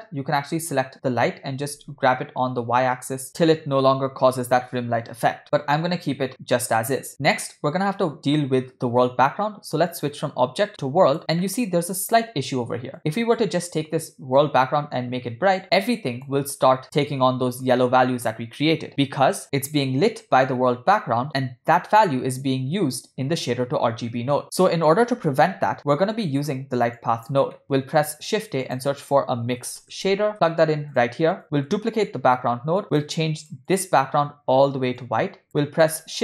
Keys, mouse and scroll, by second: 0.4 click, 1.6 g, 3.6 shift+middle click, 3.6 KP_1, 3.6 KP_5, 5.4 ctrl+z, 6.3-6.6 scroll down 2, 7.6-8.3 scroll down 2, 9.9-11.2 drag, 11.4 middle click, 12.9 click, 25.7 ctrl+z, 26.2 middle click, 27.0 click, 27.5 middle click, 27.8 shift+a, 31.4 click, 32.9 click, 32.9 shift+d, 33.7 click, 35.6 middle click, 36.0 shift+a.